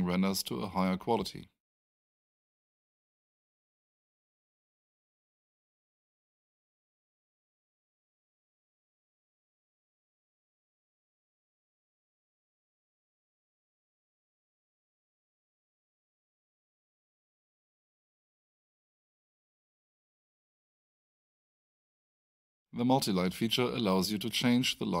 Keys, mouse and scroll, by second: 2.2-2.7 scroll up 1, 2.7-3.1 scroll down 1, 4.1-4.6 scroll up 1, 9.8 scroll down 1.